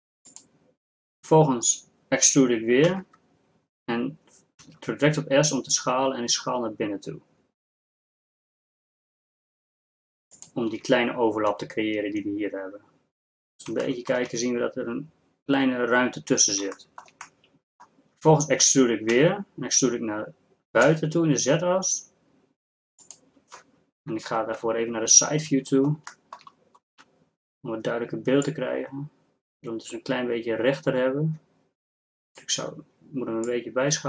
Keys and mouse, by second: 2.9 e, 12.6-16.9 drag, 19.2 e, 24.7 KP_3, 26.9 z.